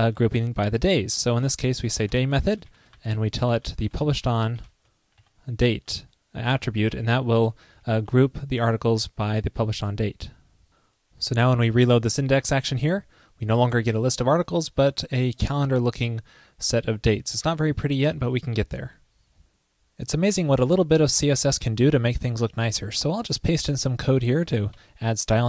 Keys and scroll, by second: 2.9 ctrl+l, 9.7 Escape, 12.5 super+r, 23.1 super+v, 24.8 super+s.